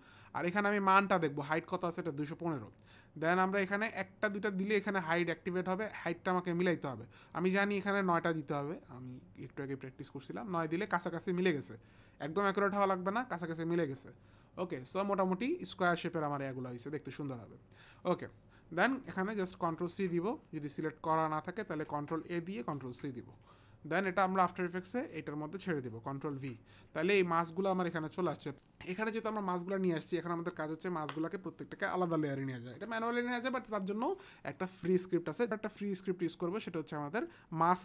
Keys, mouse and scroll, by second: 3.8 click, 4.2 click, 7.8 click, 8.1 click, 8.4 click, 18.1 click, 19.6 ctrl+c, 21.8 ctrl+a, 22.7 ctrl+c, 23.9 click, 25.0 click, 26.1 ctrl+v, 35.4 click, 35.8 click.